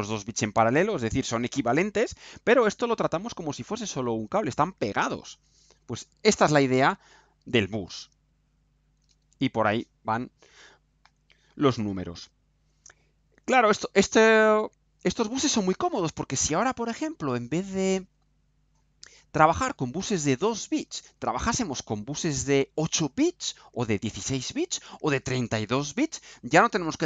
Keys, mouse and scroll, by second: 12.6-13.6 right drag.